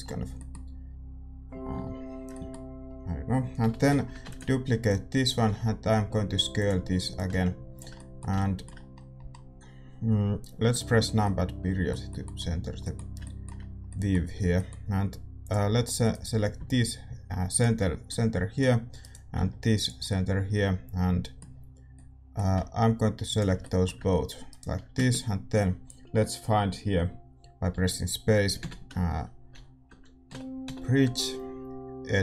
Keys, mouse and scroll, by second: 0.2 a, 3.6 l, 4.2 shift+d, 4.8-6.5 drag, 5.4 s, 7.1-9.3 drag, 7.9-14.3 middle drag, 10.6 KP_Decimal, 14.3 a, 15.4-17.5 drag, 16.1-18.0 right drag, 17.5 x, 18.9-32.2 right drag, 19.8 x, 20.5 middle click, 20.6-23.2 middle drag.